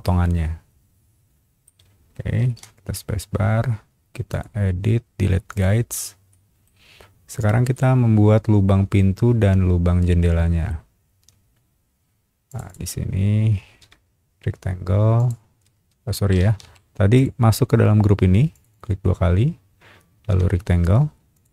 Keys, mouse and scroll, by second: 0.0-1.6 middle drag, 2.4 space, 4.3 click, 5.5 click, 6.3 middle click, 7.7-10.7 middle drag, 11.2 scroll up 1, 12.5 click, 12.7 click, 13.8 r, 15.1 click, 16.0 Escape, 16.4 space, 16.6 Escape, 16.7 middle click, 17.1 click, 18.5 click, 18.7 click, 20.3 r, 21.3 click.